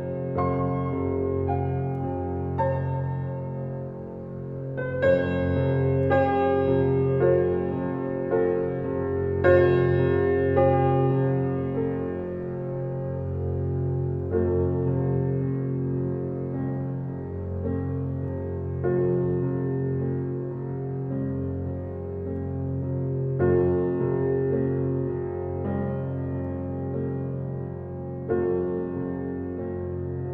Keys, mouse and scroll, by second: 0.4 scroll up 1, 1.3-1.9 typing, 4.0 space, 4.3-4.9 scroll down 1, 7.3 click, 9.2 scroll up 1, 10.2 click, 15.6 click, 16.0-16.3 scroll down 1, 16.8 scroll up 1, 18.9 click, 18.9 scroll down 1, 19.1 click, 19.4-19.9 scroll up 1, 19.9-20.2 scroll up 1, 20.2-20.8 scroll down 1, 20.8 scroll up 1, 27.0 click, 27.4-27.9 scroll down 1, 30.1 click.